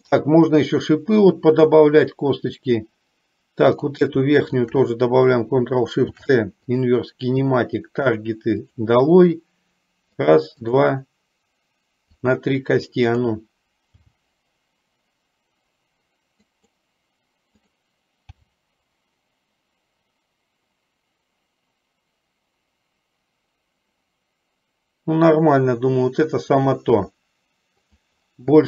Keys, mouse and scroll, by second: 3.8-4.2 drag, 6.2 ctrl+shift+c, 9.0 click, 10.8 click, 13.2 click, 14.1 g, 17.7 click, 18.6 g.